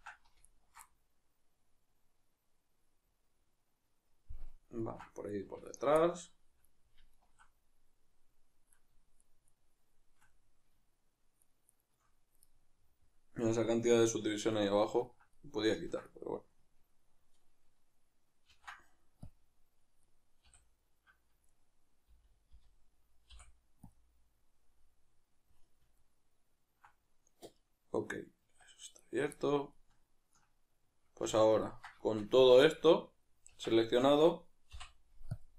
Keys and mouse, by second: 0.0 ctrl+z, 0.4 alt+shift+right click, 0.9-5.7 middle drag, 5.7 alt+shift+right click, 6.0-7.2 middle drag, 7.2 alt+shift+right click, 7.8-9.2 middle drag, 9.2 shift+right click, 10.3-11.4 middle drag, 11.4 shift+right click, 11.7 shift+right click, 12.4-21.5 middle drag, 18.5 ctrl+e, 20.5 a, 21.5 right click, 22.1 l, 25.9-29.0 ctrl+middle drag, 28.4 Tab, 29.0-29.4 right drag, 29.4-35.5 ctrl+middle drag, 31.2 a, 32.4 a.